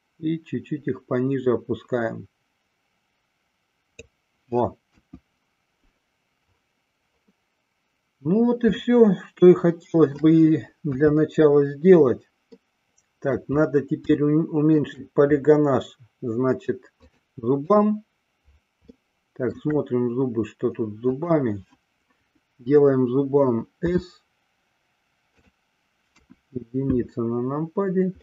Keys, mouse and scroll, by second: 5.2 KP_1, 8.8-10.4 shift+middle drag, 11.1 KP_3, 12.5-13.4 middle drag, 14.2-14.9 shift+middle drag, 17.1-18.1 drag, 19.1 shift+middle click, 21.0 click, 23.9 s, 25.7 click, 26.3 KP_1.